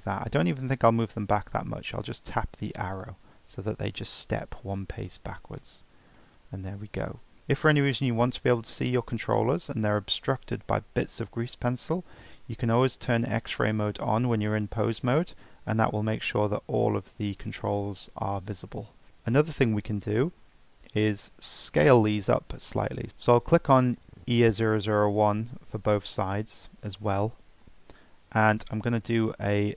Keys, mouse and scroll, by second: 0.7 ctrl+z, 2.9-4.7 alt+drag, 4.7-5.3 middle drag, 5.6 alt+middle click, 6.2-7.4 shift+middle drag, 15.9-18.9 drag, 19.1 shift+middle click, 19.2-20.1 scroll up 1, 20.1-20.7 shift+middle drag, 20.7 scroll down 2, 21.0 scroll up 1, 23.1 ctrl+z, 23.4 shift+click, 25.2 shift+click.